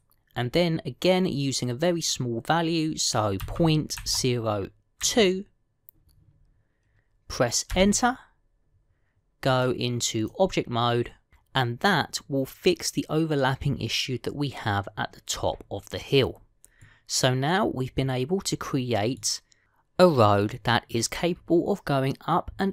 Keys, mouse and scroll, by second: 10.4 click, 17.2-17.6 scroll down 2, 17.6 middle click, 21.1 middle click.